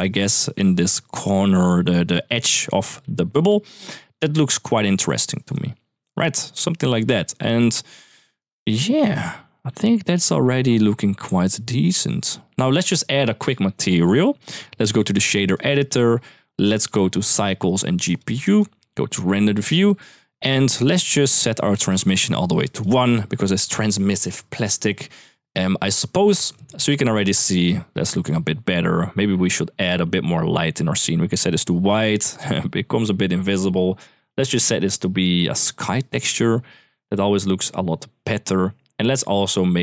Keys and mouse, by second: 3.0 m, 4.8 middle click, 5.3 middle click, 5.9 middle click, 7.3 middle click, 7.9 middle click, 14.6-15.5 drag, 16.6 click, 17.0-17.6 drag, 17.9-18.4 drag, 19.6 drag, 20.5 middle click, 21.4 click, 22.3 click, 26.5-27.7 middle drag, 29.1 click, 29.8 click, 33.9-35.6 drag, 38.8 click.